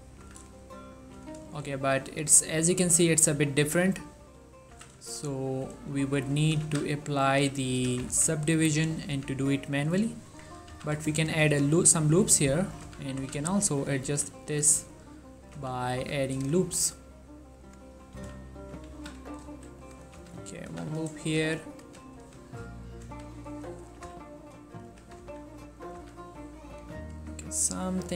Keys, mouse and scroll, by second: 0.3 z, 0.6 shift+middle click, 0.8 scroll up 1, 1.3 z, 1.6 shift+middle click, 2.3 4, 2.8-3.3 scroll down 1, 3.3 scroll up 1, 3.4 middle click, 3.7 1, 4.1 scroll up 1, 4.8-6.8 typing, 5.1 shift+middle click, 6.3 right click, 7.3 click, 7.8 g, 8.2 z, 9.1 click, 9.2 z, 10.4 Tab, 10.8 z, 11.4 ctrl+r, 11.8 click, 12.9 z, 13.3 z, 14.0 click, 14.2 s, 15.0-15.5 scroll up 2, 15.5 click, 15.7 z, 16.1 z, 16.6 click, 16.9 g, 17.7 click, 18.4 ctrl+z, 19.2 ctrl+z, 19.8 ctrl+r, 19.9 click, 20.0 right click, 20.3 z, 20.8 z, 21.6 click, 21.9 g, 22.3 y, 22.5-23.1 scroll up 2, 23.1 x, 23.5-23.9 scroll up 2, 23.9 click, 24.2-28.1 typing, 25.9 click, 27.9 click.